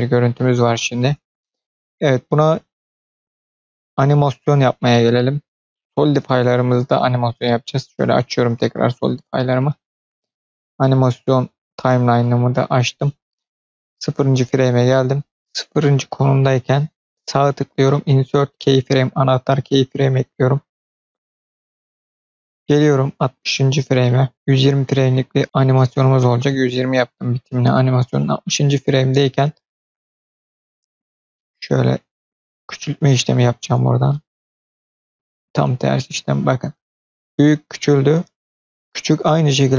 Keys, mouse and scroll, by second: 0.2-1.2 middle drag, 6.2 click, 7.3 click, 8.4 click, 11.1-12.1 drag, 13.5 click, 15.2 click, 17.0-19.3 drag, 17.0 right click, 20.4-23.8 drag, 25.4 click, 30.3 middle click, 31.3 middle click, 35.0-39.7 drag.